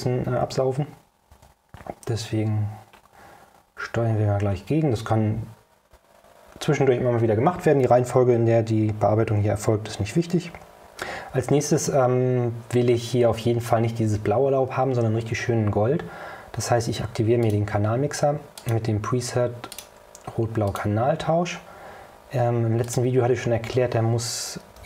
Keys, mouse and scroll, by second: 1.4 o, 2.0 middle click, 2.0 scroll up 1, 2.9 scroll up 2, 4.5 scroll up 2, 6.7 scroll up 2, 17.5 click, 18.7 click, 19.8 click, 20.8 click, 23.0 click.